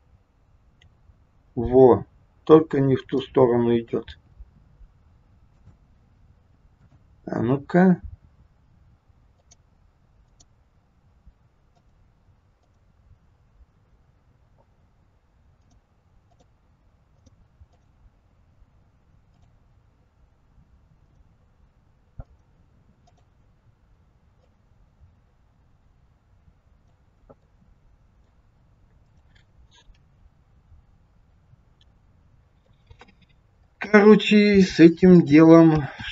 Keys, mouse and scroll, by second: 0.8 g, 3.0 middle click, 4.0 g, 6.8 click, 9.3 click, 11.7 click, 15.6 click, 17.1 click, 19.3 click, 22.2 click, 24.4 click, 27.4 middle click, 29.0 click, 30.0 g, 33.9 ctrl+z, 34.9 ctrl+alt+click.